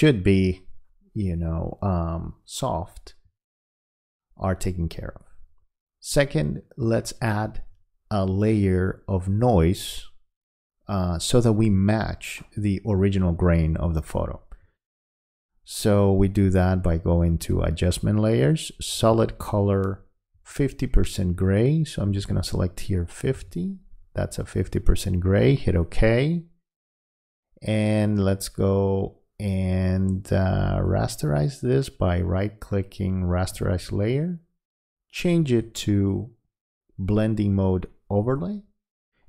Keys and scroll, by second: 23.3 5.